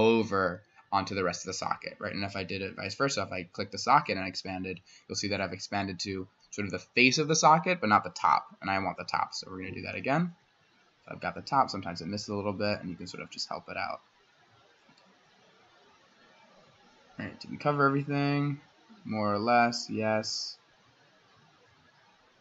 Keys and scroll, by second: 1.9 Escape, 2.4 s, 7.8 Escape.